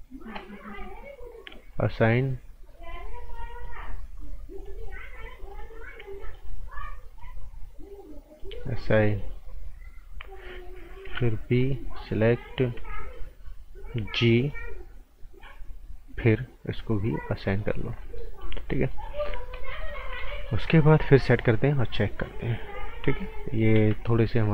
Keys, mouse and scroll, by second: 1.7 click, 3.1 right click, 4.6 click, 6.2 alt+right click, 7.1 click, 8.6 right click, 9.9-11.0 scroll up 1, 11.0 b, 11.6 click, 12.7 g, 14.4 click, 17.8 scroll down 1, 18.0 right click, 18.5 scroll up 1, 18.7 right click, 19.3 scroll down 1, 19.5 right click, 20.1 z, 20.4 right click, 21.0 click, 23.2 scroll up 1, 23.4 right click, 23.7 ctrl+z, 24.0 scroll up 1, 24.3 right click.